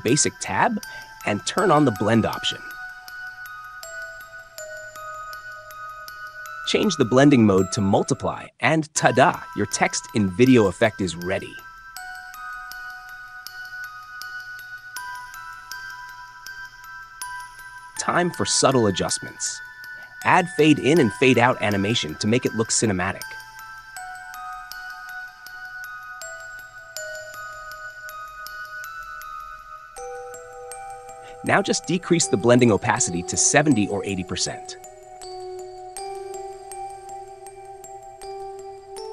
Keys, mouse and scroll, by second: 0.0-1.0 drag, 3.9 click, 6.2-7.2 drag, 8.4-9.4 drag, 14.1-15.1 drag, 17.4-18.4 drag, 19.4 click, 22.8-23.8 drag, 25.0-26.0 drag, 27.2-28.2 drag, 28.5-29.6 drag, 31.4-32.4 drag, 34.0 click, 37.4 click, 38.1 space.